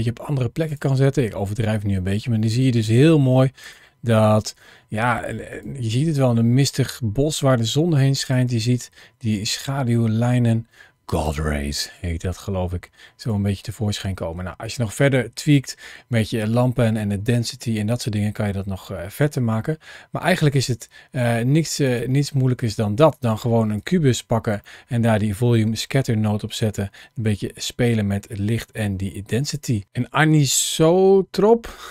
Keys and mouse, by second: 0.5 click, 2.8 g, 4.6 g, 5.3 click, 7.2 g, 8.1 click, 9.0 g, 11.8 g, 13.1 click, 17.9 g, 19.0 click, 20.1 middle click, 24.6 middle click, 25.4 middle click, 29.4 click.